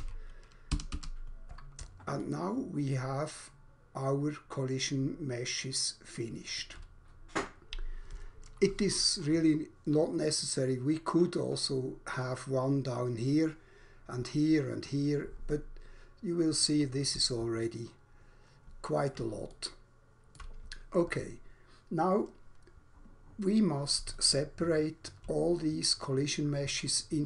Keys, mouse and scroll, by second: 0.8 Escape, 2.3 alt+click, 17.6 alt+click, 19.6 alt+shift+click, 24.1 alt+click.